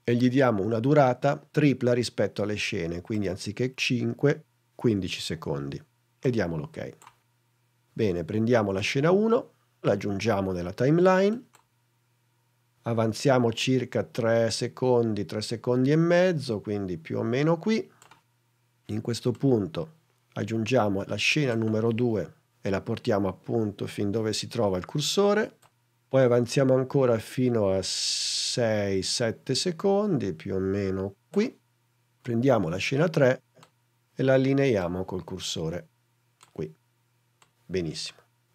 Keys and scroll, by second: 5.0 l.